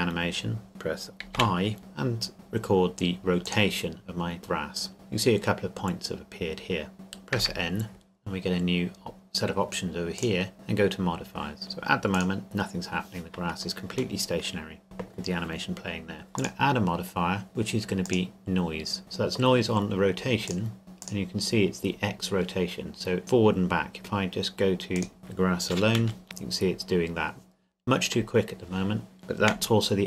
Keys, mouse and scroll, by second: 3.4 click, 7.4 n, 10.2 click, 12.1 click, 13.0-13.9 scroll up 2, 14.2-15.6 shift+middle drag, 16.4 click, 20.4 click, 23.2 middle click, 25.0 click, 26.0 KP_Decimal, 26.2 KP_3, 29.5 KP_1.